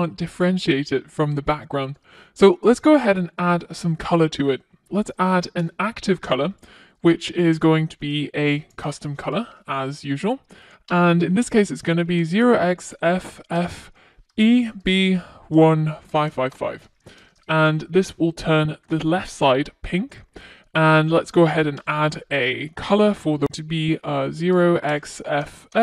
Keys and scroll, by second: 5.6 Return, 10.2 Return, 16.6 super+s, 20.6 super+s, 24.6 Return.